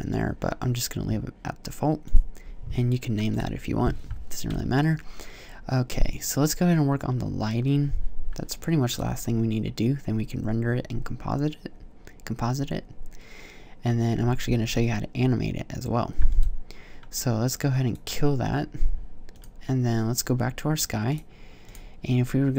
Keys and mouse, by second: 21.7-22.5 drag.